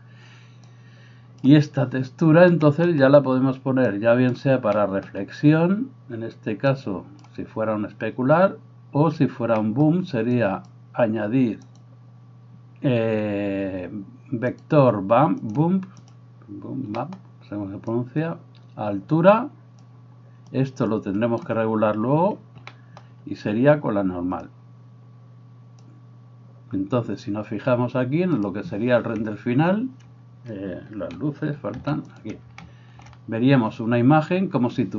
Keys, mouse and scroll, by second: 0.7-16.2 drag, 16.2-17.9 middle drag, 17.9-28.9 drag, 28.9-34.9 middle drag, 31.7 alt+h.